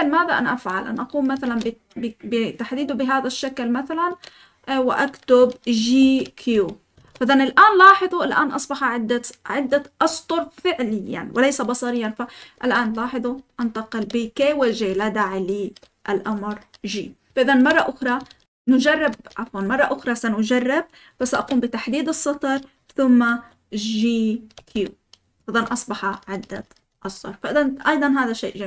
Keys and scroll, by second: 1.4 shift+v, 5.9-7.0 typing, 11.9-16.9 typing, 18.0-19.2 typing, 19.6 Escape, 21.3 shift+v, 24.3-26.9 typing, 25.5 Escape.